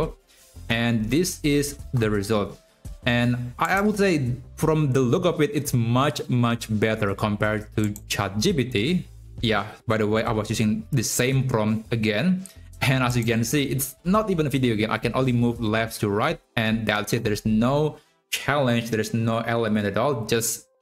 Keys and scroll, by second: 0.0 Up, 0.0 Right, 0.6 Up, 1.4 Right, 13.7 Up, 14.1 Right, 16.0 Left, 16.5 Right, 17.1 Up.